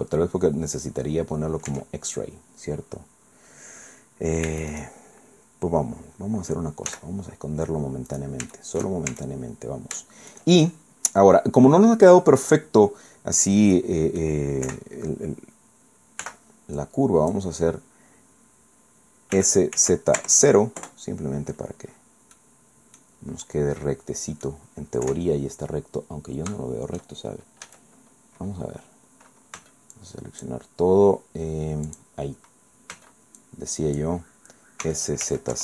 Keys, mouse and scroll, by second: 1.7 Tab, 4.5 Tab, 4.7 right click, 5.8-6.5 scroll down 2, 6.9 h, 7.3 scroll up 2, 8.1 right click, 8.5 shift+right click, 9.1 shift+Tab, 9.5 shift+scroll up 2, 10.0 shift+right click, 13.7 click, 14.7 KP_1, 16.2 b, 16.8 click, 19.3 s, 19.7 z, 20.2 KP_0, 20.8 KP_Enter, 21.9 scroll down 2, 22.3 click, 23.0 scroll up 2, 23.1 scroll down 2, 23.5-24.7 drag, 25.1 KP_1, 25.5-26.0 scroll up 2, 26.5 scroll up 3, 27.7 a, 29.5 b, 29.9 click, 31.9 click, 32.9 b, 33.4 click, 34.8 s, 35.3 z, 35.5 KP_0.